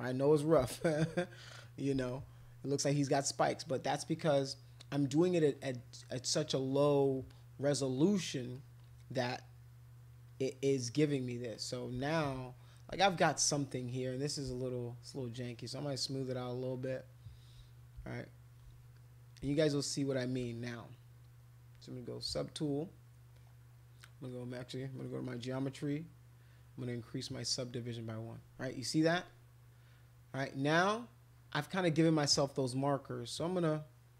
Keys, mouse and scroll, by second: 0.6 shift+click, 1.2 click, 2.1 alt+click, 2.9 click, 3.9 click, 4.9-6.4 drag, 6.5 click, 7.3 click, 7.8 click, 8.5 click, 9.2 click, 10.2 click, 10.9 click, 11.1 click, 11.5 click, 12.3 shift+click, 13.1 alt+click, 13.4 click, 15.4 shift+click, 15.8 shift+click, 16.3 shift+click, 16.7 shift+click, 17.3 shift+click, 18.2 shift+click, 18.4 shift+click, 19.0 click, 19.7 shift+click, 19.9 shift+click, 21.9 click, 23.3 click, 24.3 click, 25.0 click, 26.4 click, 27.4 click, 28.7 alt+click, 29.3 click, 33.4 click, 33.9 click.